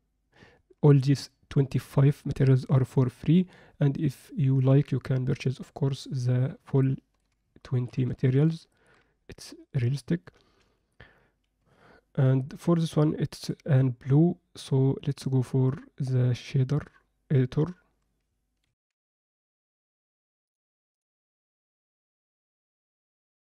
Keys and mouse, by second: 1.0-2.5 drag, 3.2 Escape, 5.6 click, 6.8 ctrl+alt+middle click, 7.6 ctrl+alt+middle click, 8.7 ctrl+middle click, 10.6 n, 11.6 z, 18.7 ctrl+F10, 20.5 click.